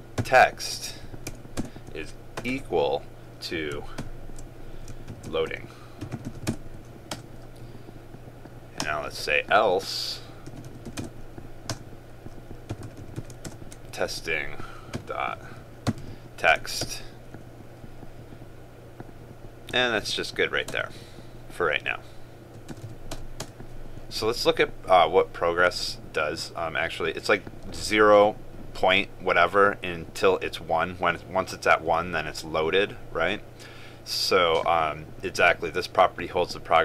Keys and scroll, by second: 13.6 ctrl+space.